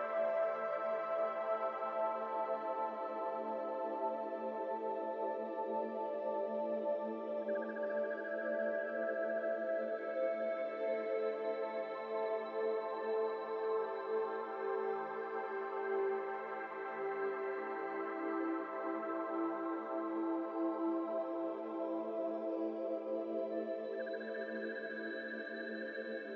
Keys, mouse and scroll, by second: 1.8 scroll down 2, 1.9 middle click, 2.9-8.4 drag, 8.4 x, 9.1 shift+a, 10.7 middle click, 10.9 scroll up 2, 11.0-14.7 typing, 15.1-15.5 shift+middle drag, 15.5 scroll up 2, 15.8 g, 17.1 z, 17.4 middle click, 18.1 KP_7, 20.0 KP_7, 21.1 g, 22.2 r, 23.3 r, 24.9 g.